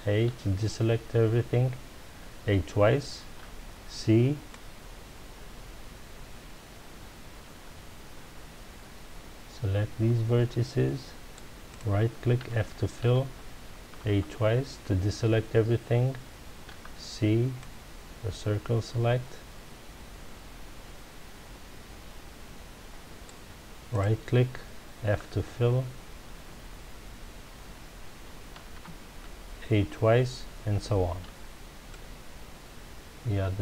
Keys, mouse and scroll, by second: 3.4 c, 11.7 right click, 12.4 f, 13.9 a, 16.7 c, 24.0 right click, 25.0 f, 28.6 a, 31.2 c.